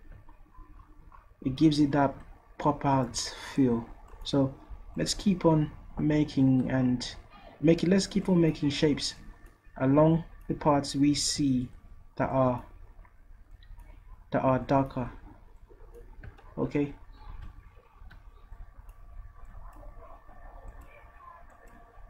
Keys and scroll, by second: 17.3 ctrl+z, 18.0 ctrl+z.